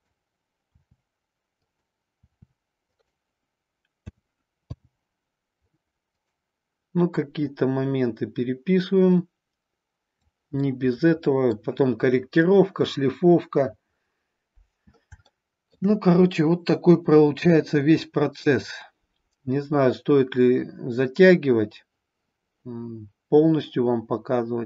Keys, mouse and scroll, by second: 0.0 click, 0.6 r, 1.6 click, 2.2 r, 2.9 click, 4.0 a, 4.6 i, 7.4-10.3 drag, 10.5-11.5 middle drag, 15.2-15.8 shift+middle drag.